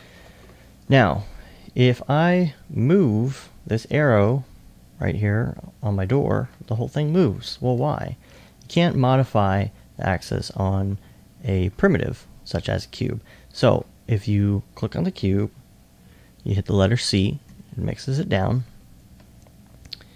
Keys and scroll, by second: 17.5 c, 19.0 c.